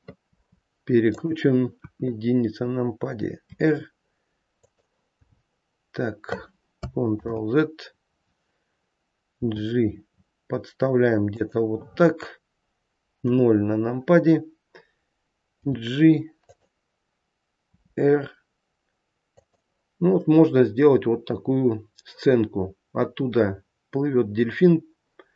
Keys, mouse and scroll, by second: 0.3 r, 1.8 KP_1, 5.3 h, 7.1 ctrl+z, 9.4 g, 13.2 KP_0, 14.2-15.6 scroll down 2, 15.6-16.2 scroll down 1, 15.6 g, 17.7 r.